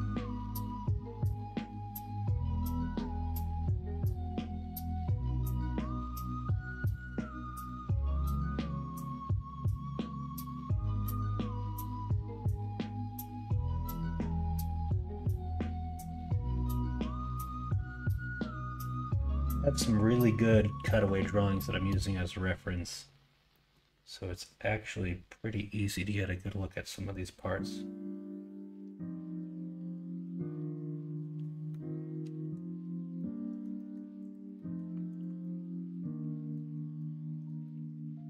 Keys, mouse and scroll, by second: 31.7-32.5 middle drag, 33.1-33.6 middle drag, 33.7 middle drag, 34.5 middle drag, 35.4-36.5 middle drag, 37.0 middle click, 37.6-38.2 middle drag.